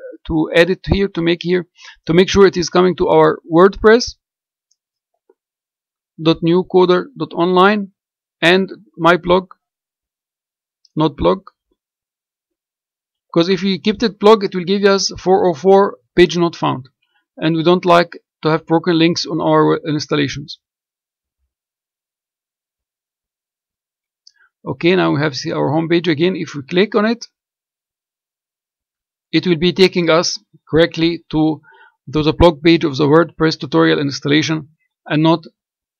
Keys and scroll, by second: 4.0-6.1 typing, 7.5 ., 11.3 m, 11.9 y, 12.7 -.